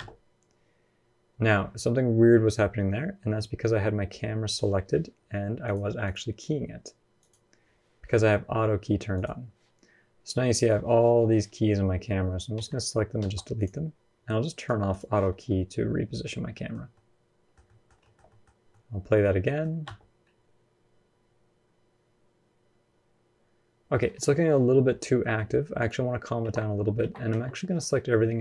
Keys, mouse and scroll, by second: 5.4 click, 7.0 click, 12.4 a, 13.0 x, 14.4 click, 14.7 click, 15.3 middle click, 16.1 scroll down 2, 16.3 middle click, 17.8 shift+middle click, 18.1 middle click, 19.6 space, 24.6 space, 24.7-25.0 scroll down 2, 25.0 middle click, 25.6 click, 26.2 ctrl+Tab, 26.8 ctrl+Tab, 27.1 a.